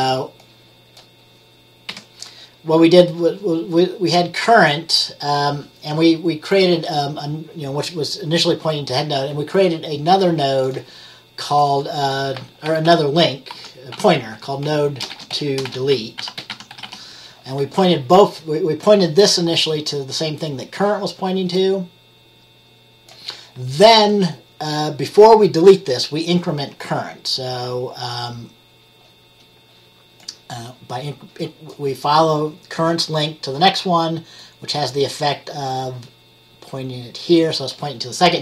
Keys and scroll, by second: 2.0 Delete, 12.5-17.4 typing.